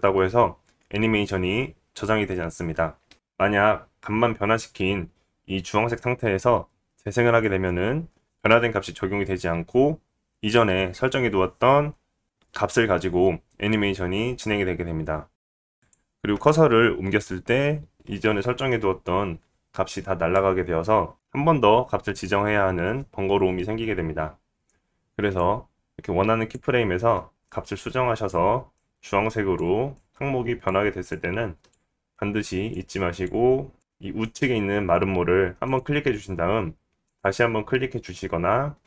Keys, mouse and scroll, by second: 11.4 space, 15.8 click, 24.5 click, 25.9-29.2 drag, 25.9-29.2 middle drag, 25.9-29.2 right drag, 30.8 click, 31.9 click, 35.7-37.0 drag, 37.1-38.8 drag.